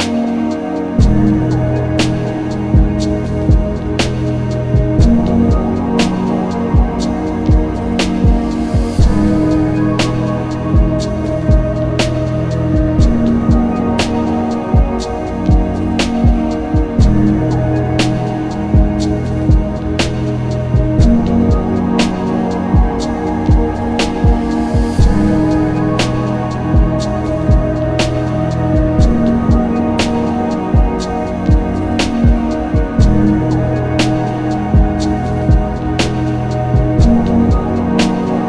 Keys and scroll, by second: 0.0 q, 2.4 b, 2.8 s, 3.3 ctrl+z, 4.1 ctrl+z, 5.2 x, 7.3 ctrl+z, 8.2 ctrl+z, 12.0 ctrl+z, 12.6 ctrl+z, 13.6 ctrl+z, 18.0 ctrl+s, 25.2 s, 25.7 ctrl+alt+z, 26.4 alt+z, 27.4 alt+z, 27.7 alt+z, 28.0-28.9 typing, 30.4 ctrl+alt+z, 30.6-32.9 typing, 31.9 ctrl+z, 34.5 typing, 37.2-38.4 typing.